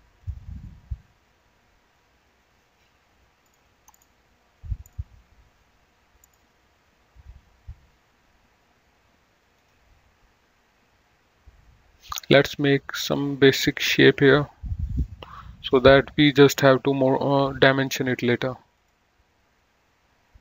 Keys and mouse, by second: 0.5 click, 9.8 click, 12.6 click, 13.8 click, 15.1 click, 18.9 click.